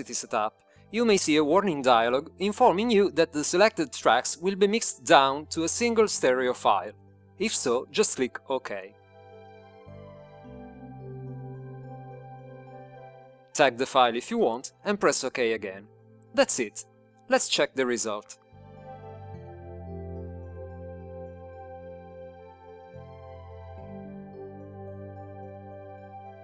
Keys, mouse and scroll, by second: 11.5-12.9 drag, 17.1 click, 18.7-19.8 drag, 20.3-22.4 drag, 24.8 click, 26.1 click.